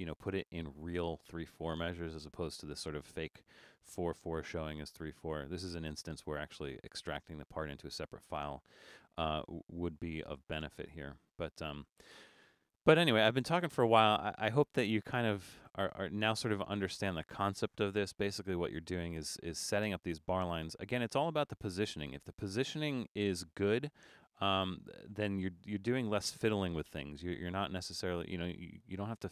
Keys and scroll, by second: 18.6 super+-.